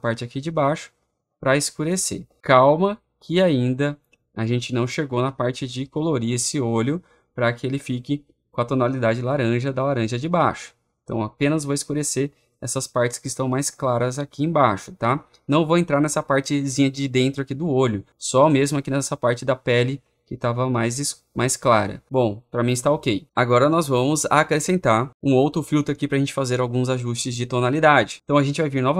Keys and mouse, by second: 0.2 click, 1.9 click, 2.2 click, 2.9-4.9 drag, 4.9-8.2 drag, 9.2-10.3 drag, 10.6 middle click, 11.0 middle click, 11.4 middle click, 11.8 middle click, 12.5 middle click, 13.0 middle click, 13.6 middle click, 14.0 click, 14.7 click, 18.4 click, 19.0 click, 19.3 click, 19.7 click, 22.0 click.